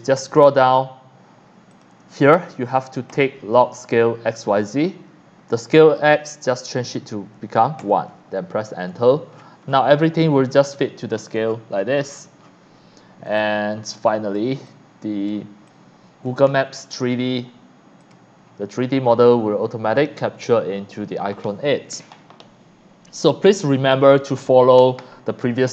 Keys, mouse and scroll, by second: 1.7 click, 3.1 click, 5.6 click, 7.8 KP_1, 8.2 KP_Enter, 9.0-9.9 scroll down 3, 10.0 x, 10.1 click, 10.5 c, 10.7 click, 11.5-11.9 shift+scroll down 2, 12.1 shift+scroll up 1, 12.4 shift+middle click, 13.3-14.4 drag, 13.3 x, 13.7 c, 14.7 click, 15.7-16.3 drag, 18.0 click, 19.9 click, 20.2 click, 23.5 click.